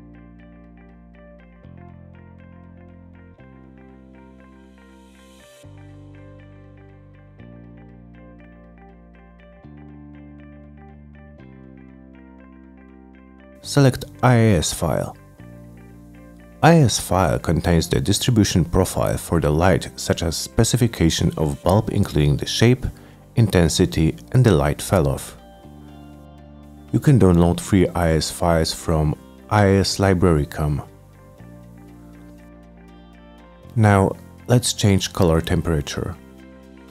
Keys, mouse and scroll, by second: 0.2 right click, 0.3 middle click, 0.3-0.6 scroll up 2, 0.6 middle click, 0.9 click, 1.1 s, 1.5 middle click, 2.0 click, 2.3 click, 2.9 alt+middle click, 3.6 alt+middle click, 4.1 click, 4.6 click, 4.7 middle click, 5.4 click, 5.9 middle click, 5.9-6.9 typing, 6.5 middle click, 6.7 middle click, 7.2 click, 7.5 scroll down 1, 7.8-8.2 scroll up 1, 8.2-9.3 drag, 9.7 click, 10.0 c, 10.4 F3, 11.5 click, 12.4 click, 14.6 click, 16.1 click, 16.3 click, 17.4 click, 24.8 click, 25.6 click, 27.5-29.1 scroll down 5, 29.5 click, 30.1-32.6 scroll down 1, 32.6 middle click, 34.6 click, 34.9 click, 35.2 click, 35.3 click, 35.4-36.4 typing.